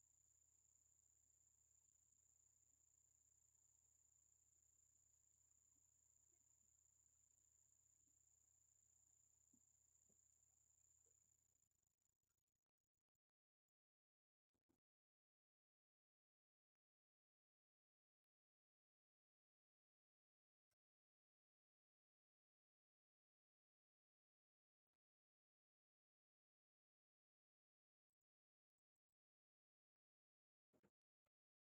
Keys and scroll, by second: 3.5 ctrl+j, 7.3 ctrl+a, 19.4 ctrl+j, 22.9 ctrl+a.